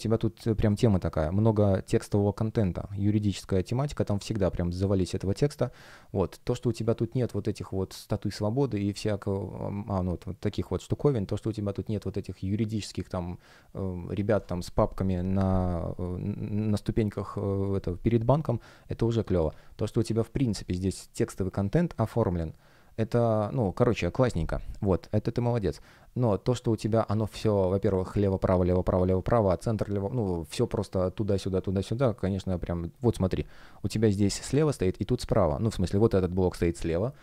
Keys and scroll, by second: 35.5 F1.